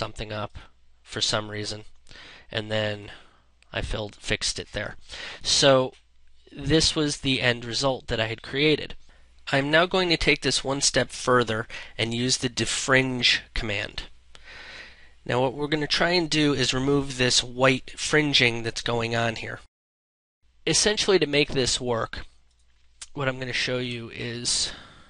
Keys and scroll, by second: 9.2 ctrl+space, 23.2 ctrl+0.